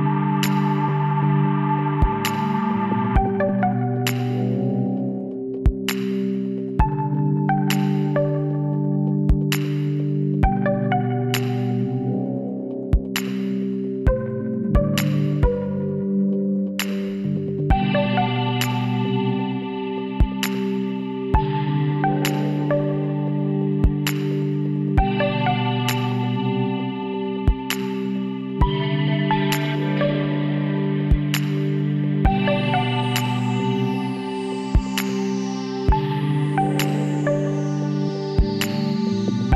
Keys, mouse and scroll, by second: 2.8 KP_Decimal, 3.5-5.2 middle drag, 6.3 r, 13.0 s, 15.9 KP_1, 16.5 middle click, 17.3 middle click, 17.5 middle click, 18.4 middle click, 18.6-20.2 drag, 22.7-24.3 drag, 24.1 z, 25.3-27.0 right drag, 26.4 b, 30.6 x, 31.9 middle click, 33.1 KP_1, 36.0 b, 38.6 s.